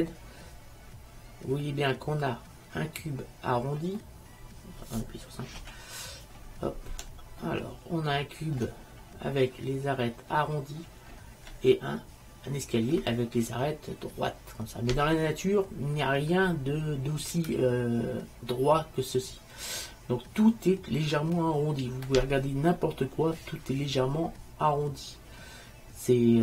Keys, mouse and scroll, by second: 5.7 KP_5.